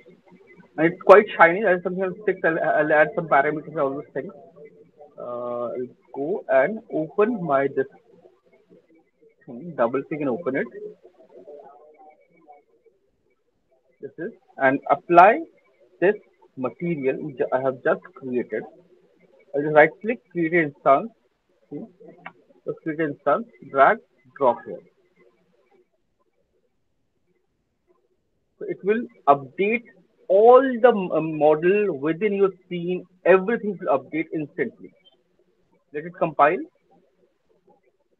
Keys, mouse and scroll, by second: 8.5 click, 9.3 click, 9.9 click, 13.7 click, 14.9 alt+right click, 15.9 click, 15.9-17.1 scroll down 12, 17.6 click, 18.5-19.5 scroll, 19.5 right click, 20.2 click, 22.0 click, 22.6 Return, 24.2 click, 28.0 click, 30.4 click, 35.5 click.